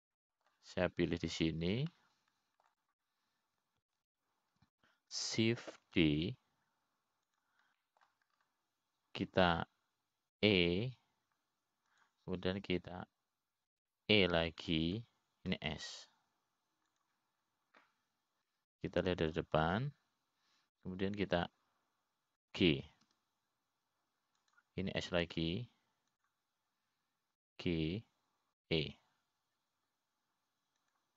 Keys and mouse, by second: 1.2 click, 1.9-3.1 middle drag, 3.8 click, 4.5 middle click, 8.4 shift+d, 10.3 middle click, 13.0 e, 16.3 e, 18.0 s, 25.6 g, 27.9 s.